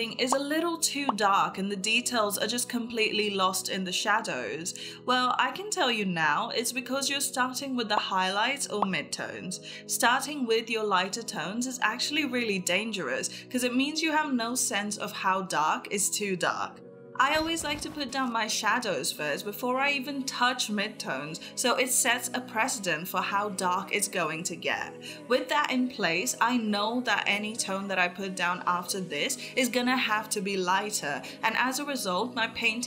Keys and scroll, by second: 22.5 space, 27.7 [, 28.7 ctrl+e, 29.0 [, 31.9 ctrl+s.